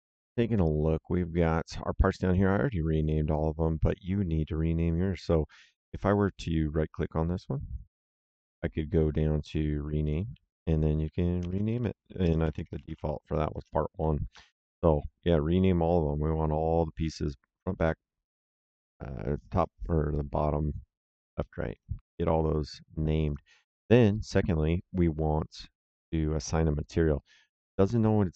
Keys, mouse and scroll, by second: 2.1 click, 6.9 right click, 10.0 click, 11.4-13.3 typing, 13.4 KP_Enter, 21.6 click, 23.2 click, 26.7 click.